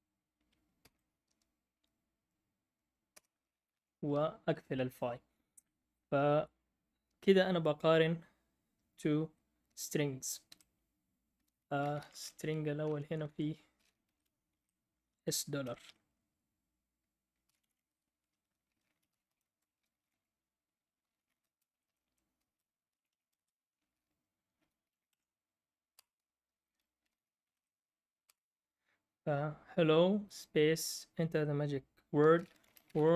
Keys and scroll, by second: 10.4 Escape, 12.1 Up, 12.8 Up, 12.8 Right, 13.0 Right, 13.0-14.5 typing, 15.6 Escape, 17.3-23.1 typing, 24.5-25.3 typing, 26.7-28.2 typing, 32.2-33.1 typing.